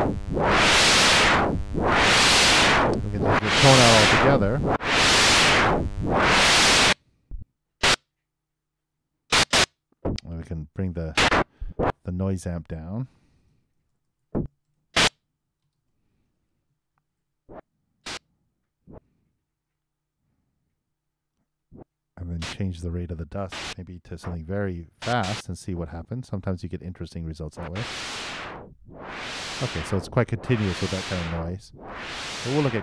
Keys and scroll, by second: 6.0 super+0, 6.3 super+Return, 16.9 super+2, 17.1 super+Return, 25.4 super+5, 27.6 super+Return, 32.3 shift+Right.